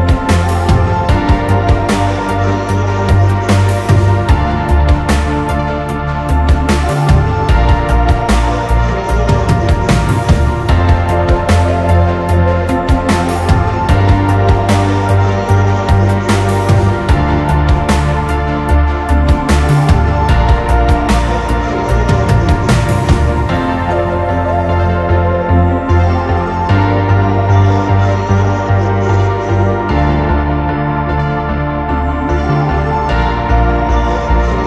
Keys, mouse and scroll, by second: 0.0-1.2 typing, 1.5 middle click, 3.4 r, 4.3 space, 6.3 Escape, 6.4 space, 6.6-7.1 drag, 8.0-15.1 typing, 9.5 Delete, 15.7-16.7 drag, 16.7-17.1 scroll down 2, 16.8 space, 17.1 middle click, 17.3-17.6 scroll down 2, 17.7 scroll up 2, 18.2 r, 18.7-19.5 scroll down 2, 19.5 scroll up 1, 19.7 click, 19.9 space, 19.9 middle click, 21.1-23.3 typing, 21.2 click, 24.5 middle click, 24.5 scroll down 2, 24.7-26.2 typing, 28.3 space, 28.7 m, 29.3 Escape, 30.0 typing, 31.2 s, 33.8-34.6 typing.